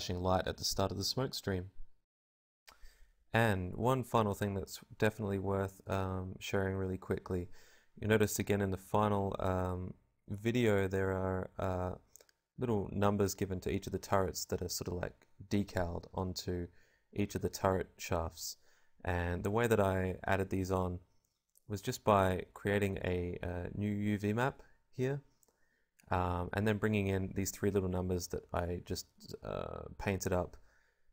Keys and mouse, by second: 0.0 F11, 0.0 Escape, 1.1 Tab, 6.4 right click, 6.9 g, 16.7 Tab, 18.6 a, 18.7 a, 26.8-29.3 drag, 26.8 l, 27.0 s, 28.1 ctrl+Tab, 29.3-31.1 typing.